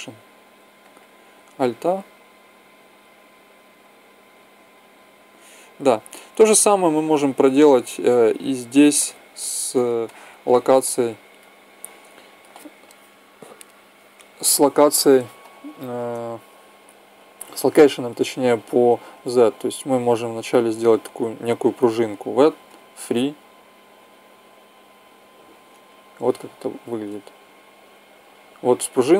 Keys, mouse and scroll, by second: 1.1 alt+a, 5.2 Escape, 6.2-8.1 drag, 9.6-13.8 middle drag, 15.6-16.8 middle drag, 16.8 click, 21.7 v, 23.1-24.9 drag, 26.0-27.9 drag, 26.7 alt+a.